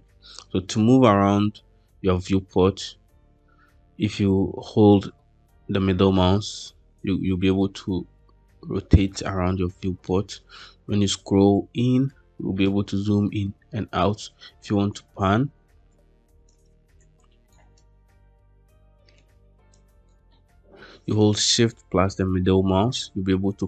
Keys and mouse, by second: 2.4-3.6 middle drag, 5.0-9.9 middle drag, 15.1 space, 16.4 space, 17.0-17.4 shift+drag, 19.7 shift+click, 20.2-21.0 shift+middle drag, 21.5-23.6 shift+middle drag.